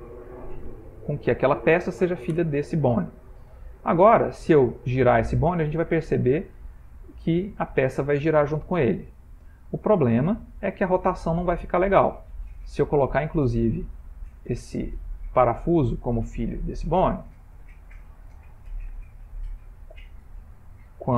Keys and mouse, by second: 0.5 Down, 0.6 Down, 0.9 Down, 1.0 Down, 3.8 click, 4.8 r, 12.5-12.9 middle click, 13.6-14.3 shift+middle click, 14.1 shift+middle click, 15.1 click, 16.6 shift+click, 17.6 ctrl+p, 20.2 click.